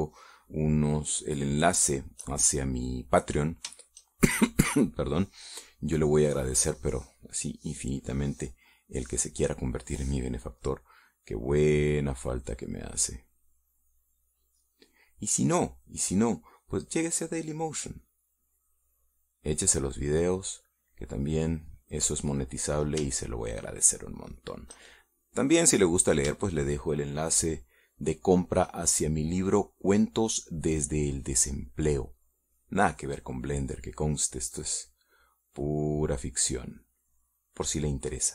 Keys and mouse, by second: 0.6 shift+middle click, 1.3 shift+middle click, 1.8 shift+middle click, 3.2 shift+middle click, 3.9 shift+middle click, 5.2 shift+middle click, 6.1 shift+middle click, 6.9 middle click, 8.5 click, 8.8 click, 9.2 click, 9.8 click, 10.5 click, 12.9 click, 13.2 click, 14.9 click, 16.0 click, 18.0 click, 18.3 middle click, 18.4-19.5 drag, 19.5 middle click, 20.3-21.9 drag, 22.6 middle click, 24.7 shift+middle click, 26.7 middle click, 27.8 shift+middle click, 28.5 shift+middle click, 29.2 shift+middle click, 33.5-35.5 drag, 36.7-38.3 middle drag.